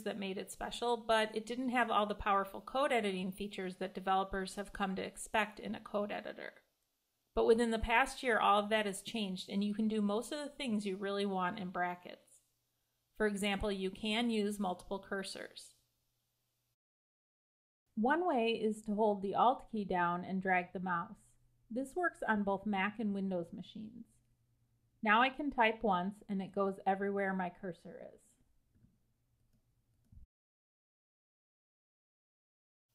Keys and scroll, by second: 13.8 Escape, 30.5 Escape.